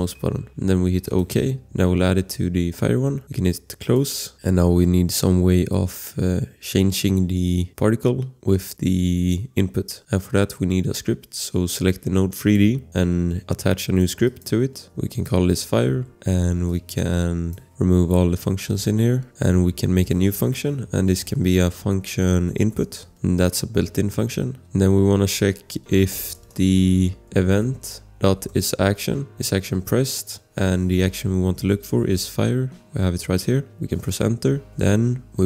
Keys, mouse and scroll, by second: 3.8 click, 4.3 click, 12.4 click, 15.3-16.4 typing, 16.7 click, 16.8 click, 19.3 scroll, 20.0 click, 20.6-23.8 typing, 23.9 Return, 25.8-29.3 typing, 29.3 Up, 29.7 Return, 33.7 Return, 35.1 click.